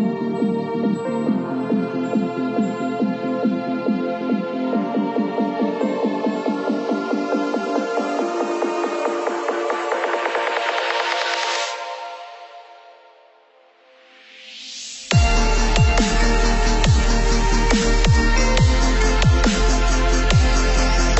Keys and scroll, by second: 5.3 ctrl+0.